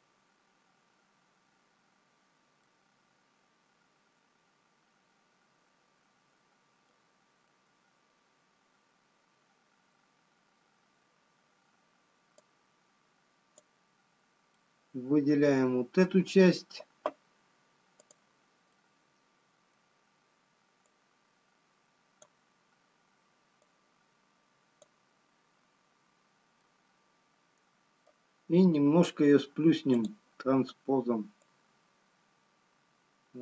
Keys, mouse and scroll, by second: 1.4 scroll down 2, 3.1 middle click, 12.9 click, 15.1 middle click, 18.6 middle click, 18.6 click, 21.3 click, 24.2 click, 30.3 middle click, 30.3 click, 32.3 click.